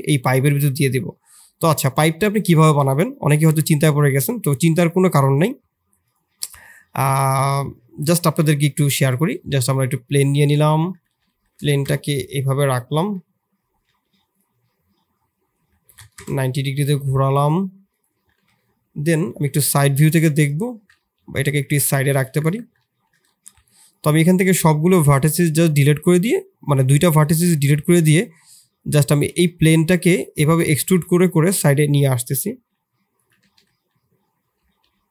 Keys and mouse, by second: 1.7-2.4 middle drag, 3.5 shift+middle click, 4.1 click, 7.0 shift+a, 11.0 r, 13.0 KP_7, 13.8 g, 14.4 r, 16.8 g, 18.4 KP_3, 19.2 Tab, 19.9 shift+middle click, 20.2 Tab, 20.9 g, 22.2 Tab, 22.8 shift+z, 23.3 1, 23.7 click, 24.0 x, 26.2 click, 27.6 e, 29.1 e, 32.3 e, 33.4 e.